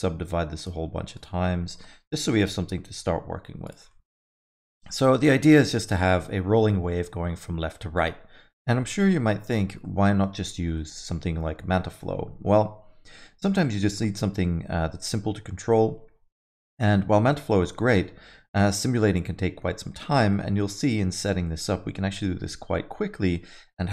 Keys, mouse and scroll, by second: 0.5 click, 1.1 click, 3.6 click, 3.8 alt+middle click, 4.1 middle click, 4.3 Tab, 4.5 alt+middle click, 4.7 middle click, 5.1 scroll up 1, 5.3 alt+middle click, 9.8 alt+middle click, 10.7 middle click, 11.6 scroll down 1, 11.8 middle click, 14.1 middle click, 20.1 middle click, 20.7 scroll up 1, 21.1 alt+middle click, 21.4 middle click.